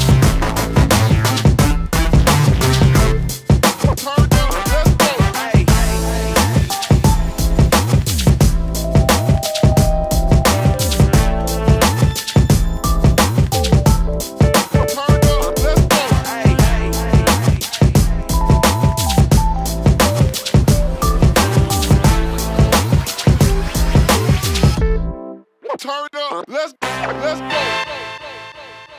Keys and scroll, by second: 18.8 p, 19.9 space, 20.9 s, 24.6 shift+space, 26.2 s.